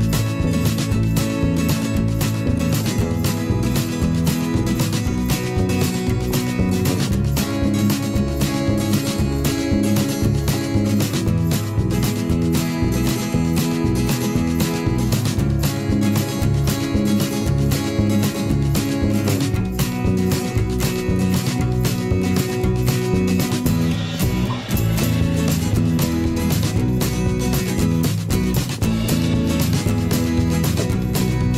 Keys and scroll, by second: 0.3 ctrl+shift+[, 0.4 ctrl+], 1.5 ctrl+], 4.3 ctrl+z, 6.0 ctrl+shift+[, 6.0 ctrl+], 6.4 shift+Up, 7.3 ctrl+shift+[, 7.4 ctrl+], 9.0 ctrl+], 9.5 ctrl+], 9.8 ctrl+], 11.2 ctrl+[, 12.5 ctrl+shift+[, 12.7 ctrl+], 23.3 ctrl+shift+[, 23.5 ctrl+], 24.7 ctrl+shift+[, 24.9 ctrl+], 30.4 ctrl+shift+[, 30.5 ctrl+].